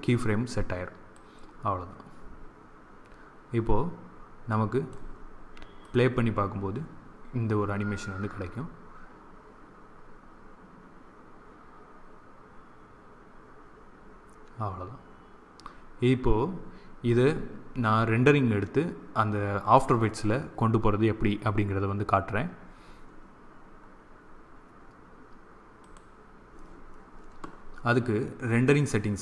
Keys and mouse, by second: 1.0-3.0 drag, 5.8-7.6 drag, 25.8 click.